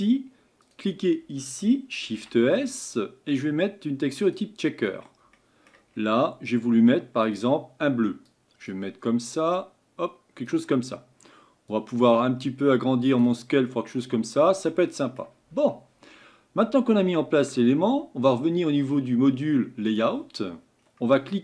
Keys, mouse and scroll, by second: 0.7 click, 11.8-13.7 drag, 13.7-14.5 middle drag, 16.6 middle click, 17.7-20.0 middle drag, 20.0 click, 20.8 scroll down 1.